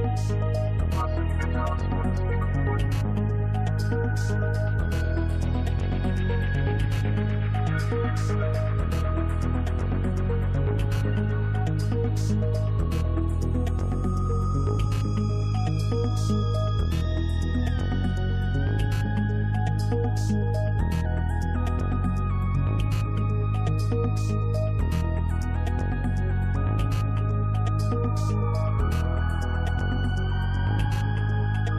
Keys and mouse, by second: 6.1-7.1 drag, 8.1 click, 11.1 click, 11.8 click, 13.5 click, 14.4 click, 14.4 right click, 17.2-23.9 drag, 24.6-28.4 drag, 28.9-31.7 drag.